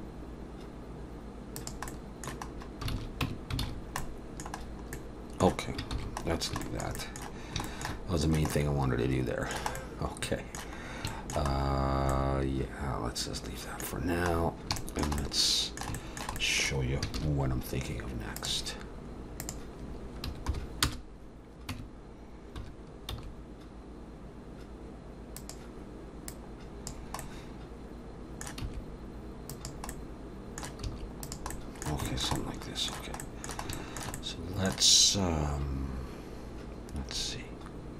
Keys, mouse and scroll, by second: 1.9 middle click, 2.5-2.9 scroll up 2, 2.9 alt+a, 3.2 Tab, 3.6 alt+a, 3.7-4.4 scroll down 3, 4.0 middle click, 4.6 scroll down 2, 4.9 middle click, 6.0 ctrl+s, 6.2-6.5 scroll down 2, 6.6 shift+middle click, 7.0 middle click, 7.4 scroll down 2, 7.6 shift+middle click, 8.5 middle click, 10.8 scroll up 2, 11.1 shift+middle click, 11.5-12.1 scroll up 2, 12.1 middle click, 12.1 scroll up 1, 14.0-14.4 scroll down 2, 14.6 scroll down 3, 14.8 shift+middle click, 15.2 middle click, 16.0 shift+middle click, 16.4 middle click, 17.2 shift+a, 19.4 click, 21.8 Tab, 22.6 1, 23.1 s, 26.3 click, 27.2 middle click, 28.6 s, 29.9 middle click, 30.8 s, 31.5 middle click, 32.1 shift+middle click, 32.4 middle click, 33.7 shift+middle click, 34.2 middle click.